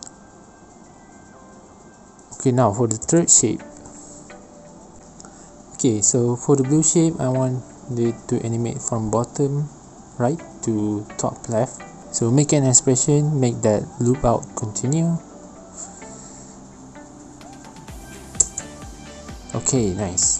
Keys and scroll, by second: 0.0 space, 0.2 alt+shift+p, 9.8 shift+Delete, 11.9 Right, 12.1-13.5 typing, 13.1 Down, 13.3 Down, 13.3 Return, 13.9 Down, 14.0 Down, 14.4 Up, 14.4 Up, 14.5 Return, 15.6 space, 18.2 space, 19.1 ctrl+z, 19.8 space.